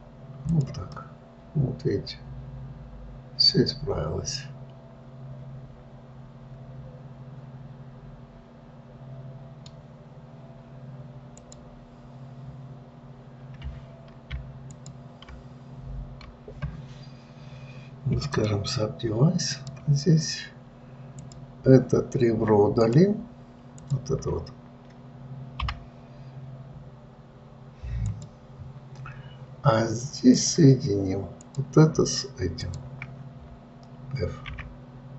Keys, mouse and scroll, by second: 0.8 click, 1.3-4.3 middle drag, 11.6 click, 15.1 ctrl+click, 18.7-21.5 right drag, 21.5 click, 23.2-24.3 drag, 26.0 Delete, 30.7 click, 31.7 click, 33.0 shift+click, 34.9 f.